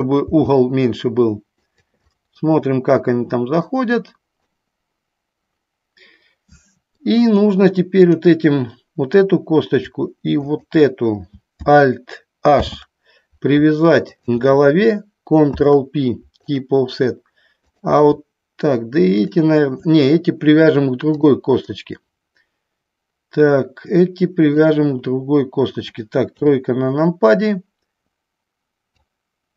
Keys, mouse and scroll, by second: 0.0 click, 1.8 click, 2.3-3.7 middle drag, 4.8-7.2 middle drag, 10.7 shift+click, 12.7 alt+h, 15.6 ctrl+p, 17.8 click, 19.2 shift+click, 21.8-24.7 middle drag, 26.4 KP_3, 29.1 click.